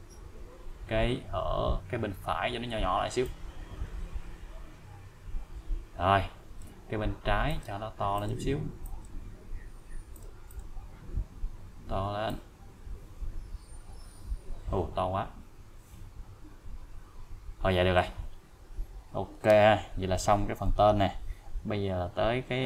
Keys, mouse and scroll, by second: 1.5 click, 1.9 scroll down 1, 3.2-6.7 click, 7.5 click, 9.3-9.8 scroll up 1, 10.1-11.3 scroll up 1, 11.3 click, 12.3-18.2 click.